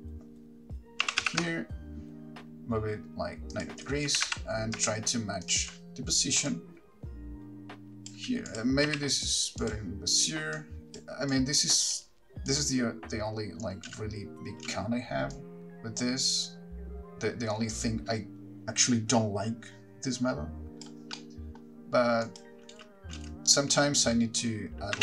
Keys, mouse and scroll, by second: 1.3 r, 3.9 ctrl+click, 4.4 g, 5.7 ctrl+click, 6.7 click, 8.7 click, 9.9 t, 10.8 click, 12.7 click, 14.1 space, 14.9 space, 15.6 click, 21.4 middle click, 22.5 click, 22.9 space, 24.0 click, 24.0 space.